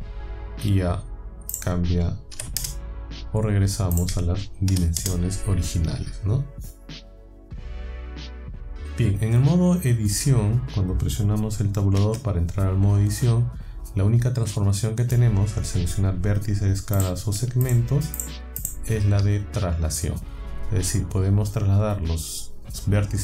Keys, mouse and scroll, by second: 1.5 click, 2.3 KP_1, 2.6 KP_Enter, 4.0 click, 4.7 KP_1, 5.0 KP_Enter, 12.1 Tab, 17.0 click, 17.7 shift+click, 18.2 shift+click, 18.6 shift+click.